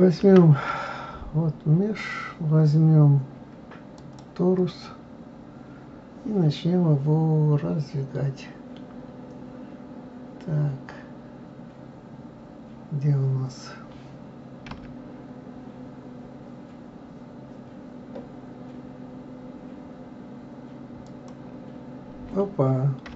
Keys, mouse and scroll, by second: 0.2 shift+a, 5.2-5.9 scroll down 2, 5.9-8.0 scroll up 1.